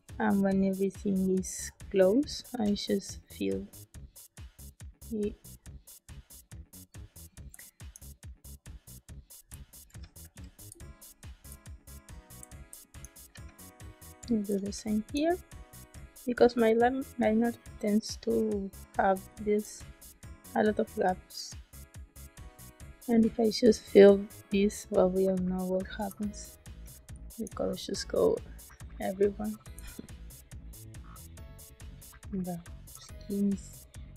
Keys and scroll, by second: 2.4 g, 7.4 space, 9.4 space, 11.4 space, 12.6 space, 13.2 b, 14.4 space, 19.1 space, 23.0 g, 26.0 space, 29.7 space.